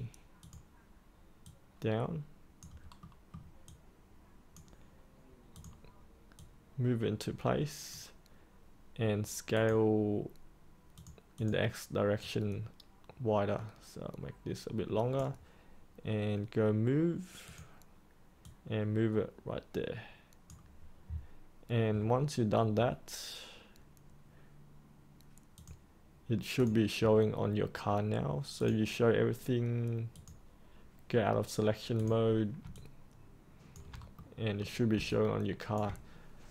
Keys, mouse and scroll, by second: 3.0 middle click, 3.6-15.0 drag, 15.0-21.1 drag, 32.7 alt+click, 34.1 middle click, 35.0 alt+click.